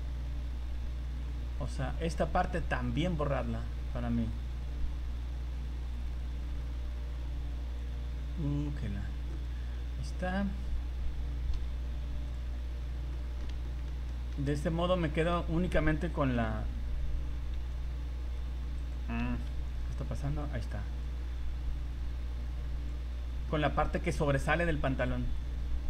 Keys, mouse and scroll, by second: 9.6 scroll down 2, 9.8-10.1 scroll up 5, 11.5 Delete, 12.8 scroll down 2, 13.1 middle click, 13.6 shift+middle click, 14.1 middle click, 14.5-15.0 scroll up 4, 15.0 middle click, 15.8 scroll down 1, 16.3 v, 16.5 scroll down 2, 17.1 scroll up 1, 18.0 scroll down 2, 18.4 scroll up 1, 19.5 c, 20.2 c, 20.7 scroll down 1.